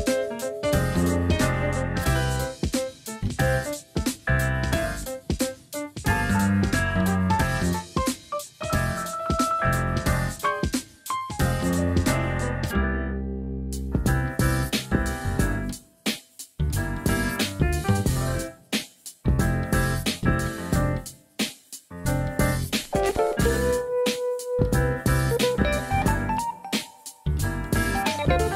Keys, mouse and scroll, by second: 0.3 click, 1.8 s, 5.6 shift+middle click, 6.4 e, 7.6-9.3 z, 11.1 KP_1, 12.7 middle click, 13.3 alt+z, 14.3 KP_3, 14.6 alt+z, 15.8 middle click, 16.7 KP_1, 18.7 click, 24.6 ctrl+r, 25.9 ctrl+r, 25.9 click, 27.8 ctrl+r, 27.8 click.